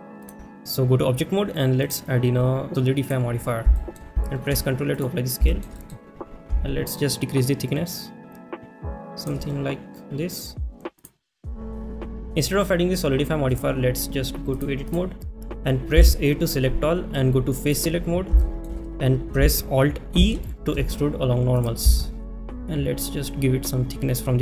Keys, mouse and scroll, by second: 1.8-3.1 drag, 3.8 shift+middle click, 5.0 ctrl+a, 5.6 shift+middle click, 5.8 middle click, 7.1-9.3 shift+drag, 13.5 click, 14.6 click, 17.7 click, 17.7 a, 18.4 shift+middle click, 21.4 alt+e.